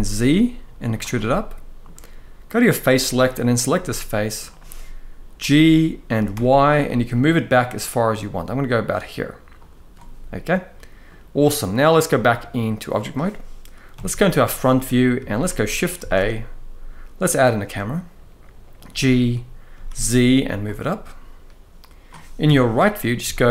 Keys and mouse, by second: 0.9 middle click, 2.4 click, 3.3 click, 3.6 middle click, 5.1 g, 6.0 y, 10.2 middle click, 11.9 click, 13.6 KP_1, 14.9 shift+middle drag, 15.7 shift+a, 18.6 g, 19.4 z, 22.2 KP_3, 23.0 shift+middle drag.